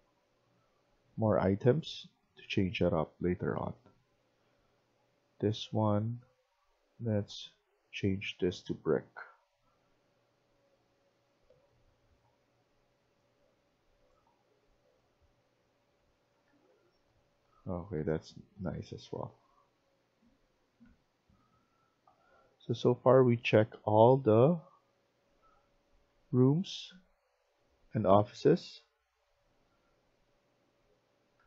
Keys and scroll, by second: 0.0-1.5 typing, 2.9-3.9 typing, 6.8-7.5 typing, 16.4 Escape, 16.6 Escape, 17.0-19.0 typing, 22.4-31.4 typing.